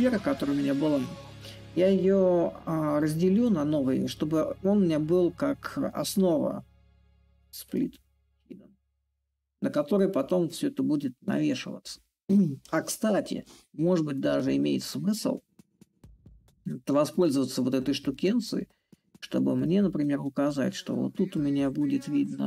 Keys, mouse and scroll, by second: 0.0-8.0 shift+drag, 9.8-14.8 drag, 16.8-21.8 drag.